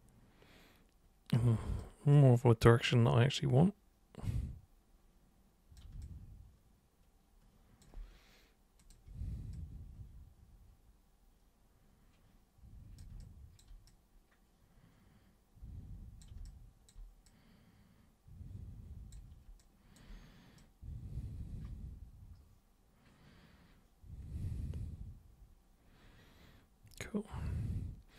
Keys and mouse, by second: 2.1-5.8 super+drag, 6.0-7.8 alt+super+drag, 8.8 super+click, 9.6-13.0 super+drag, 13.2 alt+super+click, 13.9-16.2 super+drag, 16.5 alt+super+click, 17.3-19.1 super+drag, 19.6 alt+super+click, 20.6-28.1 super+drag.